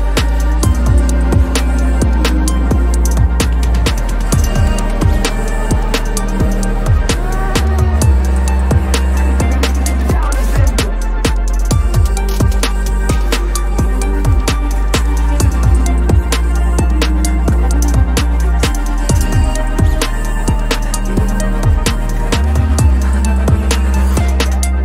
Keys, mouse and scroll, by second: 3.5 ctrl+-, 3.7 ctrl+-, 3.8 ctrl+-, 3.9 ctrl+-, 4.0 ctrl+-, 4.6 ctrl+-, 4.8 ctrl+-, 8.6-10.6 scroll up 1, 14.9 Delete, 24.6 alt+shift+click.